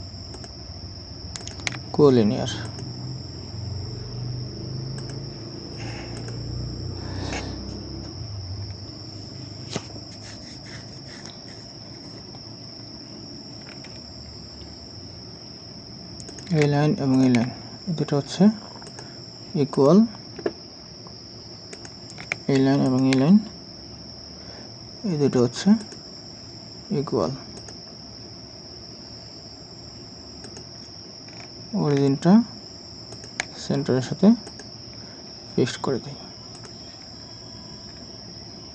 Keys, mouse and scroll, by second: 0.4 ctrl+click, 1.4 ctrl+click, 8.7 scroll up 1, 17.1 ctrl+click, 22.9 ctrl+click, 31.3 scroll down 1, 33.1 ctrl+click, 37.2-37.9 scroll up 1.